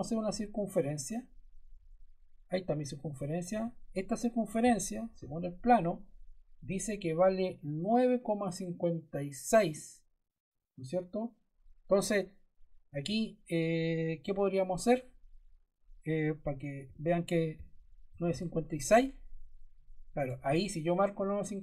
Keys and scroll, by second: 3.4 d, 16.8-18.7 typing, 20.1 Return.